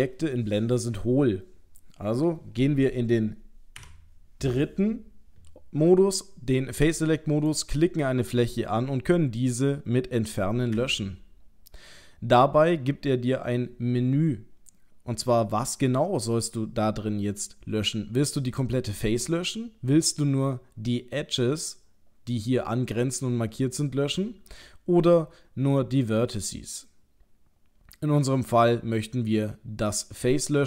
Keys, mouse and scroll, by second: 7.5 click, 10.8 Delete, 24.2 Delete.